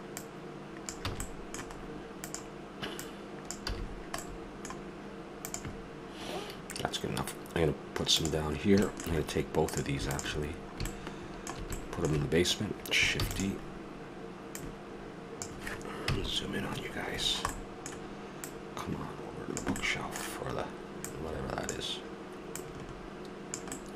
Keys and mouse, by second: 1.1 a, 1.2 middle click, 2.2-3.2 right drag, 3.7 a, 4.4 middle click, 8.9 middle click, 9.3 middle click, 9.7 click, 10.5-12.3 middle drag, 13.2 shift+d, 13.8 middle click, 14.5-16.2 drag, 16.0 KP_Decimal, 16.9-18.4 middle drag, 18.4 click, 19.8-21.6 middle drag, 21.6-23.8 drag, 23.8 middle click.